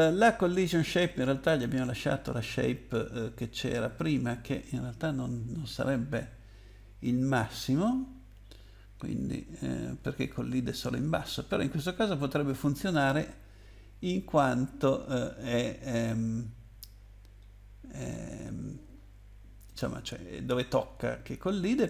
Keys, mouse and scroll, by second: 1.5 click, 9.1-9.5 scroll up 2, 12.3 scroll down 2, 15.5-16.4 scroll down 2, 18.0 scroll down 2, 19.1 scroll up 2, 20.9-21.4 scroll down 2.